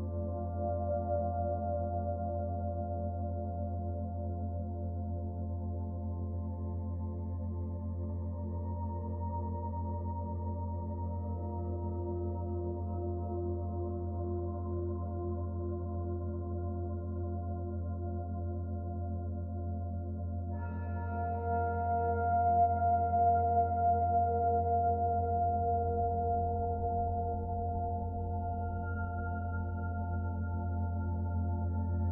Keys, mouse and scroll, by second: 0.4 click, 10.1-10.6 scroll up 2, 10.6 middle click, 11.2 shift+middle click, 12.1 scroll down 1, 12.2 middle click, 13.0 scroll up 1, 14.4 middle click, 15.8 s, 18.6 middle click, 22.9 click, 27.5 click, 29.8 click.